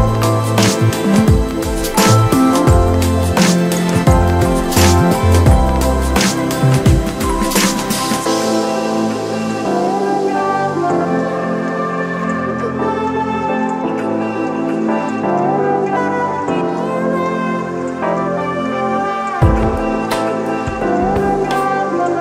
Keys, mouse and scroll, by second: 0.1-2.5 scroll up 2, 2.5 click, 3.6 Tab, 3.9-5.2 middle drag, 5.2-6.2 scroll up 2, 6.2 2, 6.7 click, 6.9 click, 7.3-8.4 middle drag, 8.4 click, 11.0 click, 11.8 click, 14.3 2, 14.7 click, 16.4 middle click, 17.2 KP_Divide, 17.8-19.6 middle drag, 19.6 click, 19.8 click, 20.9 shift+click, 21.0 shift+click, 21.5-22.2 middle drag.